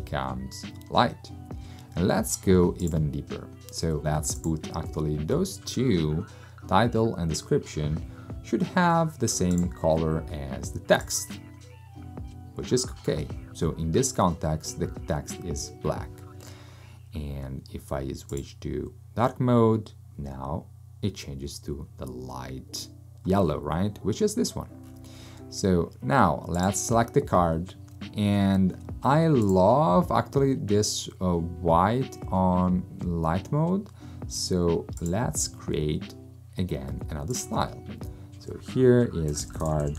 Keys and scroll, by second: 39.2-39.9 typing.